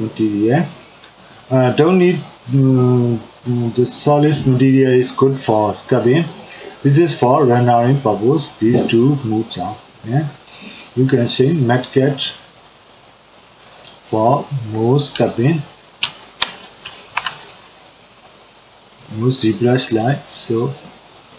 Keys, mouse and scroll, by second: 15.3-18.2 middle drag, 18.2 click, 19.3-21.3 drag.